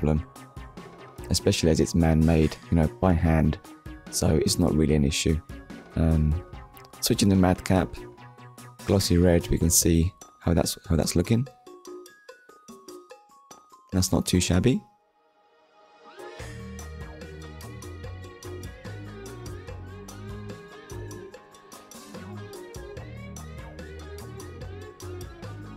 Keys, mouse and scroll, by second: 0.3 middle click, 1.3 click, 1.9 click, 2.7 click, 4.1 click, 4.3 middle click, 11.3 click, 12.1 click, 13.0-13.4 scroll down 1, 13.6 shift+middle click, 14.1 middle click, 15.2-15.6 scroll down 1, 15.7 middle click, 16.8 shift+middle click, 17.5 ctrl+s, 20.1 click, 21.2 middle click, 22.1 KP_1, 23.2 shift+middle click.